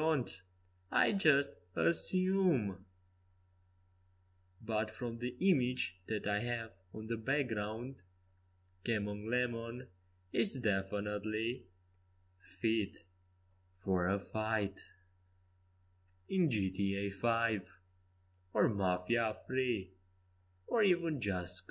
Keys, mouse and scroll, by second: 6.4 g, 14.1 r, 16.0 Escape, 16.4 a, 21.2 c.